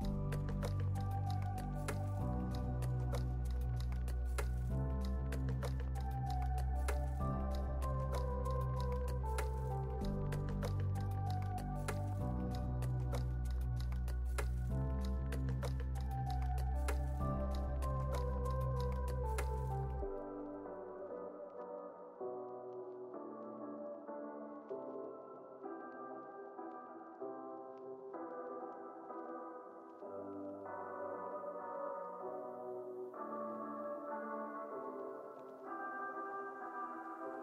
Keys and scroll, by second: 0.1 super+c, 0.3 super+v, 0.7 super+s, 2.5 super+v, 3.0 super+s, 6.5 x, 7.8 p, 9.0 z, 10.2 x, 11.3 k, 15.8 z, 16.2 x, 16.8 super+s, 18.6 z, 19.0 space, 19.7 super+space, 21.0 super+=, 21.8 space, 30.2 x, 30.9 z, 34.0 x, 36.8 z.